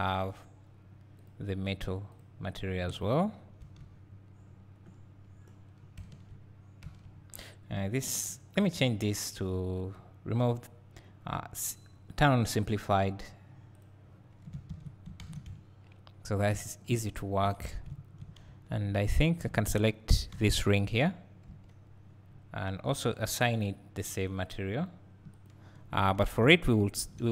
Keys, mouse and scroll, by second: 0.3-3.3 drag, 6.0 Tab, 6.3 Tab, 9.2 click, 13.9 click, 14.7 alt+a, 15.5 `, 17.0 click, 17.5 Tab, 17.9 `, 18.6 2, 19.4 click, 20.4 3, 20.6 click, 21.6 l, 24.0-26.0 drag, 26.0 Tab, 26.5 `.